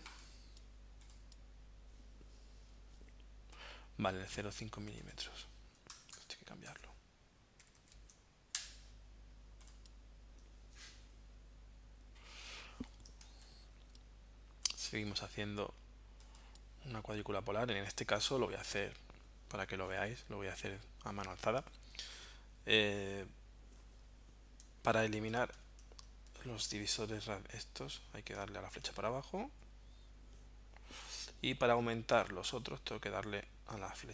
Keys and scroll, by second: 6.0 BackSpace, 7.6 m, 8.6 Return, 13.3 space, 24.7 Down, 25.3 Down, 27.9 Down, 29.6 Up, 31.3 Down, 32.4 Right, 33.9 Right.